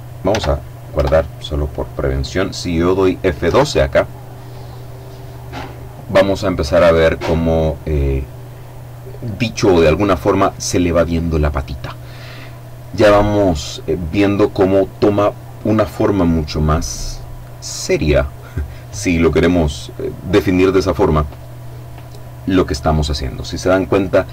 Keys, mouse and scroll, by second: 0.2 Return, 2.7 F12.